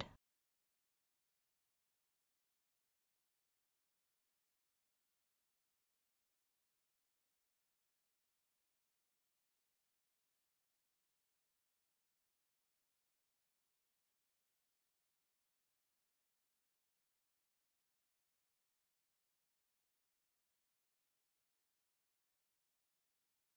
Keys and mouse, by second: 0.9 click, 1.8 click, 3.5 click, 5.1 click, 6.6-8.6 drag, 7.8 KP_0, 9.2 middle click, 10.0-10.5 ctrl+middle drag, 10.7-11.7 middle drag, 14.4 click, 16.9-18.4 drag, 18.8-19.8 drag, 20.3 click, 22.9-23.5 drag.